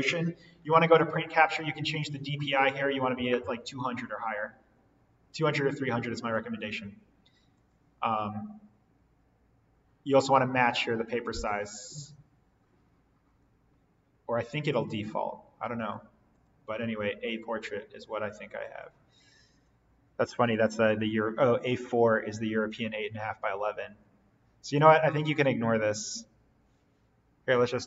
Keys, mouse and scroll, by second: 0.6 click, 6.1 click, 15.7 click, 24.7 click.